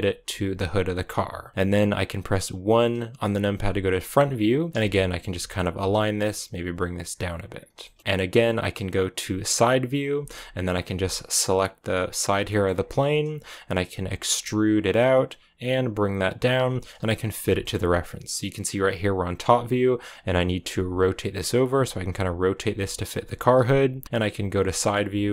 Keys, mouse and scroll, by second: 0.3 g, 3.4 KP_1, 4.7 g, 5.2 a, 5.7 b, 6.2 g, 7.7 shift+middle click, 8.0 KP_1, 9.4 KP_3, 10.3 a, 11.6 b, 12.4-14.1 shift+middle drag, 14.1 e, 16.9 KP_7, 17.5-20.0 shift+middle drag, 20.0-25.3 typing, 24.0 shift+middle click, 24.7 shift+middle click.